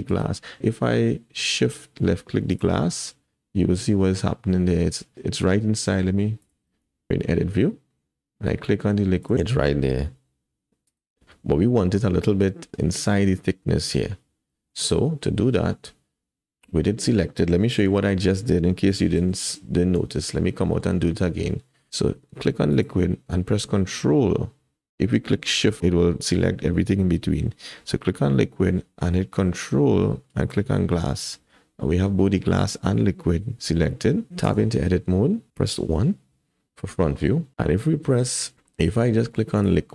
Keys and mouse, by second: 2.5 ctrl+click, 5.1 Tab, 5.1 g, 5.4 Tab, 6.9 Tab, 9.2 click, 10.1 g, 14.7 shift+middle click, 15.7 click, 15.7-17.1 middle drag, 17.8 alt+a, 18.1 middle click, 18.9 KP_1, 19.3 alt+z, 20.0 Tab, 20.3-20.8 drag, 21.9 alt+a, 22.8 click, 30.4 ctrl+click, 34.4 Tab, 35.9 KP_1, 37.1 shift+middle click, 39.6 click.